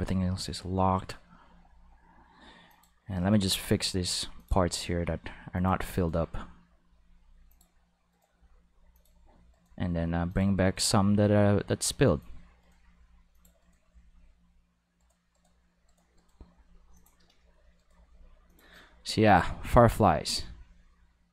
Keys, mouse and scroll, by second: 0.2 g, 2.7 click, 3.2 right click, 3.4 g, 4.4 click, 4.7 click, 4.7 right click, 4.9 g, 5.5 click, 5.9 right click, 6.1 g, 7.5 click, 8.1 right click, 8.3 g, 8.9 click, 9.5 right click, 9.7 g, 10.3 click, 10.6 right click, 10.8 g, 12.0 click, 12.6 right click, 12.8 g, 13.3 click, 13.6 click, 13.6 right click, 13.8 g, 15.0 click, 15.0 right click, 15.3 right click, 15.9 right click, 16.1 right click, 16.5 g, 16.9 click, 17.8 right click, 17.9 g, 18.5 click, 19.7 right click, 20.2 g.